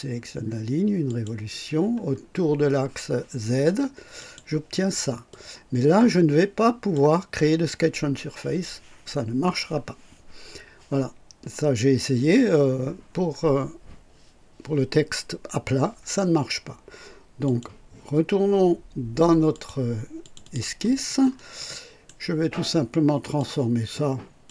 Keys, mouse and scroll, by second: 1.1 click, 4.2 click, 5.3-7.1 drag, 17.4 click, 19.5 click, 20.2 click, 21.3 scroll up 2, 21.7 right click, 23.2 click.